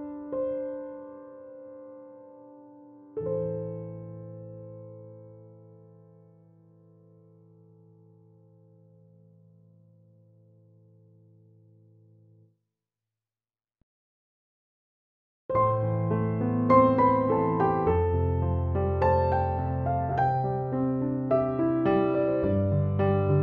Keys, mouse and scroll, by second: 7.3 click, 11.0 click, 13.3 Down, 16.7 Up, 18.2 Down.